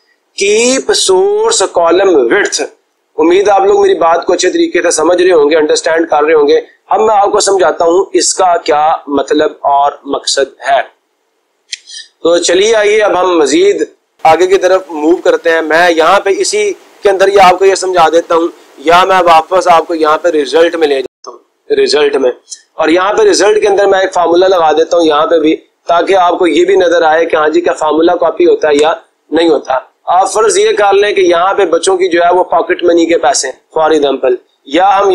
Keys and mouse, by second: 15.4-16.4 drag, 19.4-20.5 drag, 23.5-24.6 drag, 25.1-26.4 typing, 28.9 Return, 31.2 click, 31.8 click, 32.0 click, 33.1 click, 33.3 click, 34.9 ctrl+a.